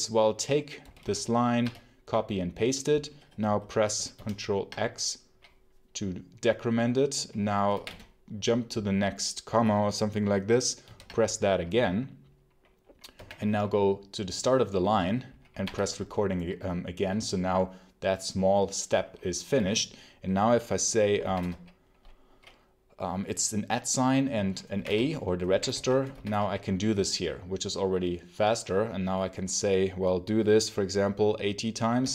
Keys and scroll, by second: 0.7 y, 1.5 p, 4.0 ctrl+x, 7.4-8.2 typing, 10.7 ctrl+x, 13.0 0, 15.5 q, 20.8-21.8 typing, 24.4-26.7 typing, 31.6-32.1 typing.